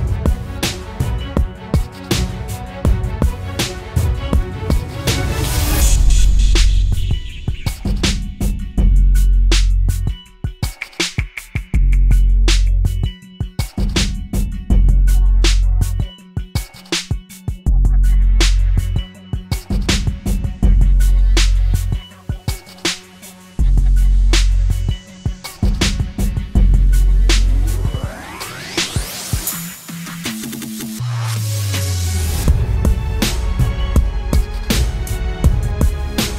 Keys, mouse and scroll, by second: 29.8 alt+click, 35.8 right click.